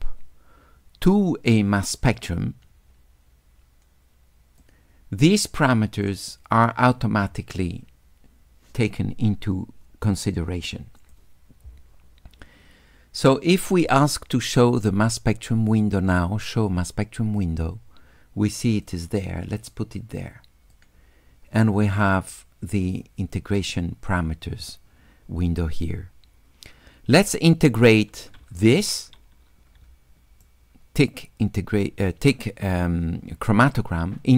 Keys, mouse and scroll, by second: 2.1 click, 4.6-6.1 drag, 11.0 click, 14.4 click, 17.4 click, 18.9-20.7 drag, 26.9 middle click, 26.9-27.2 scroll up 2, 29.9 s, 30.5-34.3 drag.